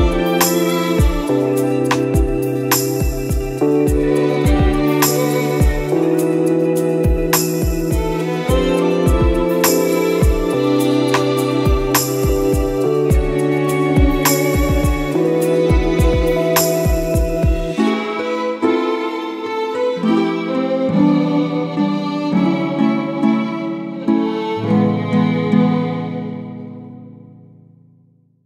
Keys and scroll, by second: 0.0 ctrl+d, 1.6 ctrl+d, 2.0 ctrl+d, 6.0 ctrl+-, 6.9 ctrl+e, 7.3 ctrl++, 7.6 ctrl++, 8.6 ctrl++, 9.0 space, 9.4 space, 18.5 ctrl+z.